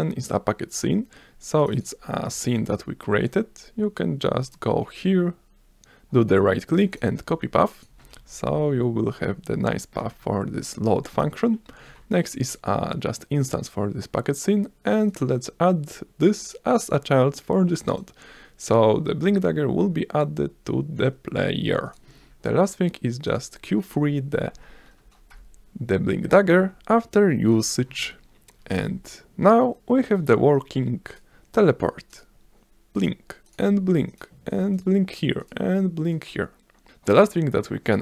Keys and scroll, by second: 7.9 space, 11.2 BackSpace, 12.5 s, 23.3 s, 25.0 Return, 25.3 BackSpace, 26.6 q, 27.5 Return, 28.8 s.